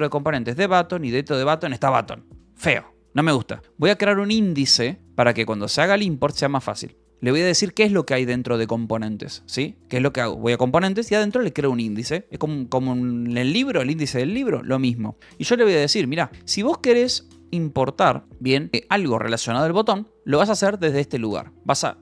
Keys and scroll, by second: 3.6 ctrl+k, 6.1 k, 6.7 Escape, 7.9 ctrl+k, 9.4 :, 10.8 Return, 15.7 Return, 15.7-18.4 typing.